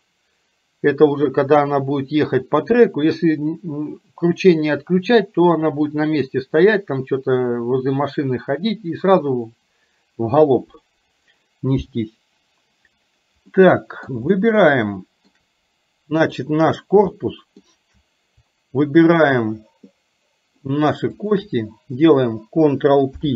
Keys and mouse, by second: 13.7 middle click, 14.3-15.4 shift+middle drag, 17.3 shift+middle click, 21.3 shift+click.